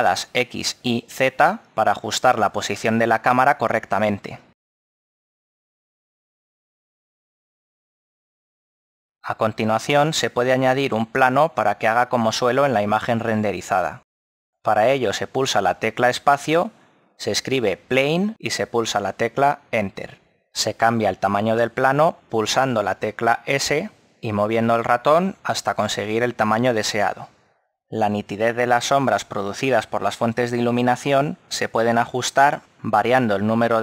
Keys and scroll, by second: 17.1 space, 21.6 s, 26.5 KP_0, 29.9 s.